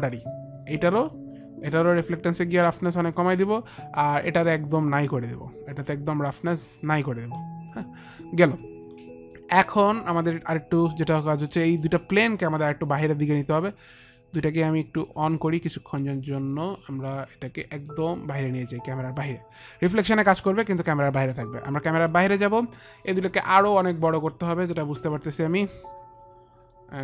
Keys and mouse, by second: 1.6 click, 3.0 click, 4.1 click, 5.8 click, 6.6 click, 8.5 click, 11.4 click, 11.8 ctrl+click, 17.2 click, 22.0 click, 24.1 alt+middle click, 26.6 click.